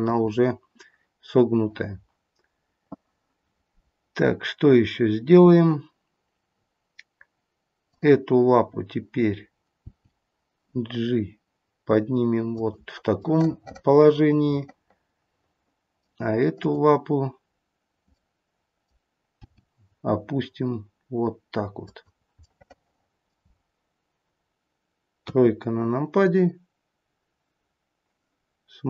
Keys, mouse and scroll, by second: 7.7 click, 9.7 g, 13.2 middle click, 16.5 click, 18.0 middle click, 19.3 g, 22.2-22.6 scroll up 5, 22.6 middle click, 23.5-25.3 scroll down 1, 25.3-25.7 scroll down 2, 25.3 KP_3.